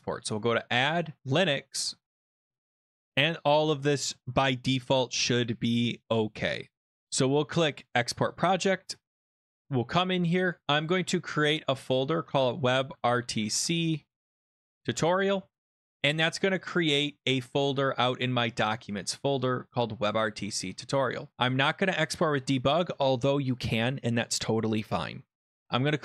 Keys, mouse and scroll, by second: 0.3 click, 1.2 click, 5.3 click, 5.6 click, 6.1 click, 6.8 click, 7.9 click, 9.4 click, 10.5 click, 10.9 right click, 11.5 click, 12.0-15.2 typing, 17.7-18.4 typing, 19.0 click, 19.4 click, 20.5 click, 21.3 click.